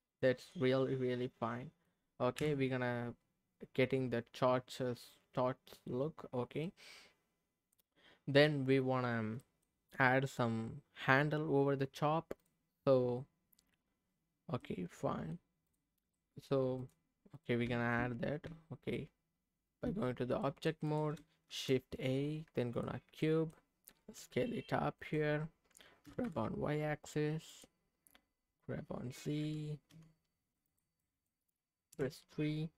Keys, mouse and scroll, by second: 0.1 click, 0.5-1.9 middle drag, 2.3 KP_3, 3.1-5.4 scroll up 2, 6.4 scroll up 1, 6.6-8.5 middle drag, 8.8-9.4 scroll down 2, 9.4 middle click, 12.4 click, 14.6 middle click, 15.7 click, 16.1 middle click, 16.8 click, 17.3 click, 17.7 Tab, 18.5 Tab, 20.4 middle click, 20.8 click, 21.5 shift+a, 23.2 middle click, 24.2 s, 25.0-26.0 drag, 26.0 g, 26.2 y, 27.5 click, 29.4 g, 29.9 z, 30.7 click, 31.0 middle click, 31.9 KP_3.